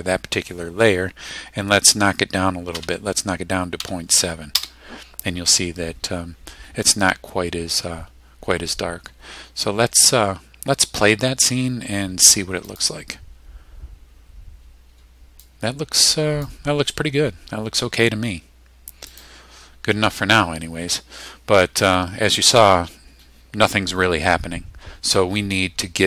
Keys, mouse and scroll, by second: 2.7 KP_Decimal, 3.8 KP_7, 4.5 KP_Enter, 12.7 click, 15.4 click, 19.1 click.